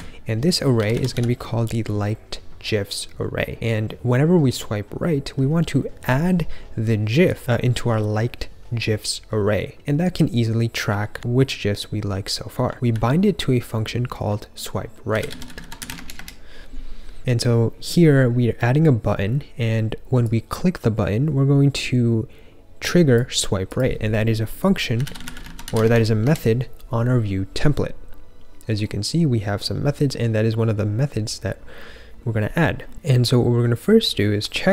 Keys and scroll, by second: 0.5-1.6 typing, 12.5-13.2 typing, 15.0-15.8 typing, 15.9 Return, 16.1 Return, 24.9-25.7 typing, 25.8 Return, 26.2 Return.